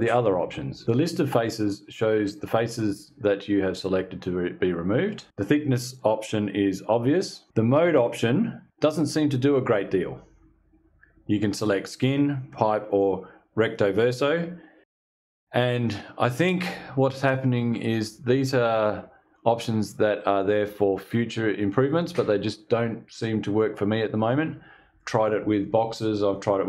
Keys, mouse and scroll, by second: 8.1 click.